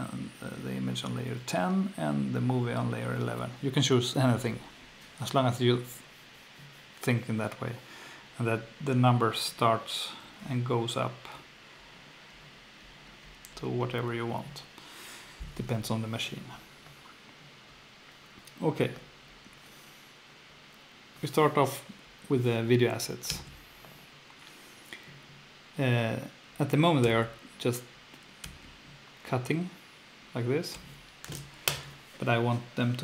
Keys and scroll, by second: 23.3 F2, 27.0 F2, 30.7 F2.